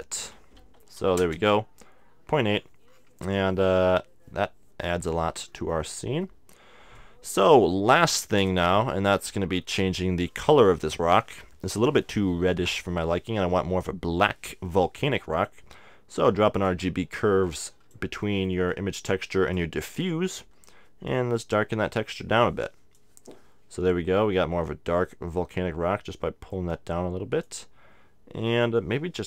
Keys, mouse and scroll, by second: 2.5-5.4 middle drag, 5.4-7.5 middle drag, 7.0-8.7 drag, 7.0 right click, 8.7-12.8 middle drag, 9.6 shift+a, 16.7-20.7 drag, 18.2-19.9 middle drag, 21.0-24.3 drag, 26.5-28.4 drag.